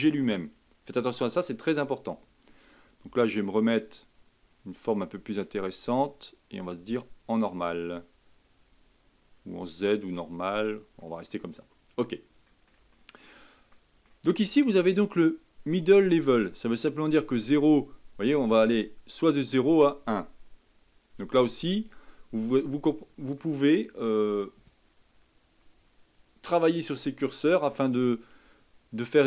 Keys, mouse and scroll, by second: 3.8-9.2 drag, 9.5-11.0 drag, 11.0 middle click, 11.5 scroll up 2, 12.4-15.2 middle drag, 15.2-18.4 drag, 23.3-26.5 middle drag, 29.0-29.2 drag.